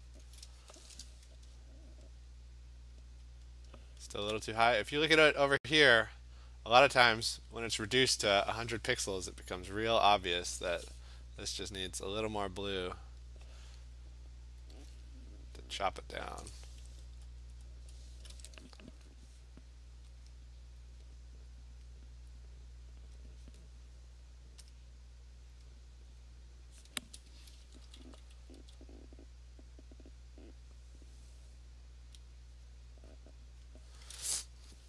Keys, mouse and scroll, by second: 0.2 click, 1.5-2.1 scroll, 7.7-9.4 middle drag, 13.2 click, 16.1 click, 17.2-18.2 scroll, 20.3 click, 21.0 click, 21.7 click, 21.8 click, 22.8 click, 23.1 click, 23.3 click, 24.7 click, 25.6 click, 26.2 click, 27.6 [, 27.8 [, 28.1 [, 28.5 [, 32.2 click, 32.7 click, 33.2 click, 33.7 click.